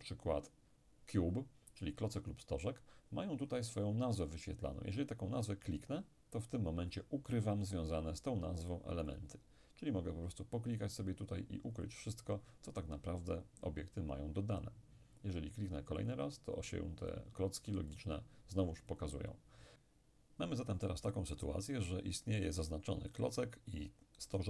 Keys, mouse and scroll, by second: 5.8 click, 9.1 click, 10.8-12.9 drag, 16.0-19.8 drag, 19.8-21.9 middle drag.